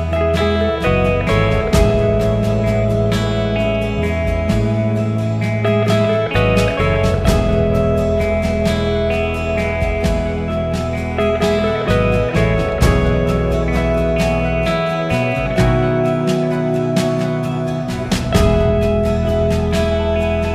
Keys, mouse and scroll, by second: 0.0 click, 2.6 click, 2.9 click, 3.9 click, 4.9 r, 7.1 click, 9.3 g, 12.1 click, 13.7 g, 16.2 s, 20.0 g.